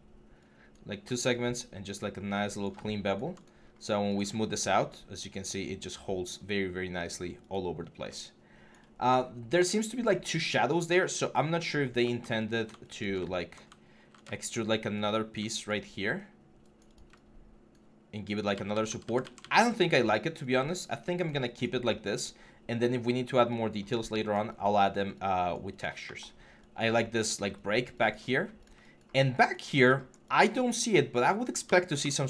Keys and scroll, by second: 3.5 3, 7.6 1, 13.8 ctrl+e, 16.0 3, 18.3 ctrl+z, 31.7 ctrl+e.